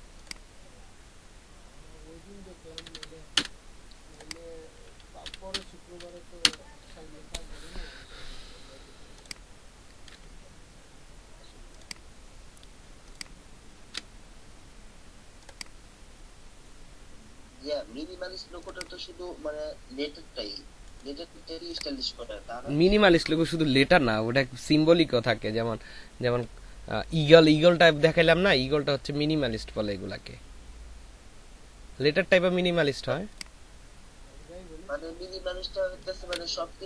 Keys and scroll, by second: 2.8 w, 3.4 Return, 5.2 f, 5.5 b, 6.5 Return, 13.7 ctrl+v, 36.1 ctrl+v.